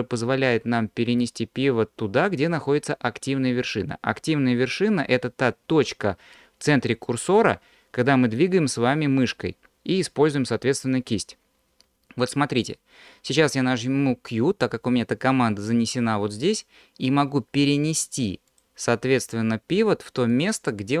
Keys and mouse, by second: 14.7 q, 19.8 q.